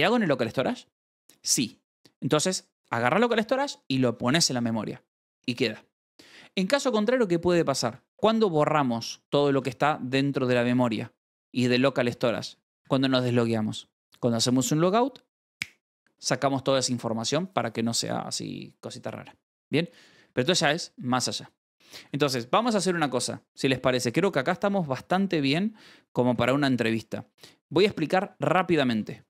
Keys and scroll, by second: 7.6 Escape, 7.7-9.5 typing, 10.6 Escape, 11.3-12.2 typing, 12.8 Escape, 19.7-20.7 typing, 23.0 g, 24.6 d, 24.9 k, 25.4 Escape, 25.5 j, 26.6 g, 28.0 k, 28.9 shift+v.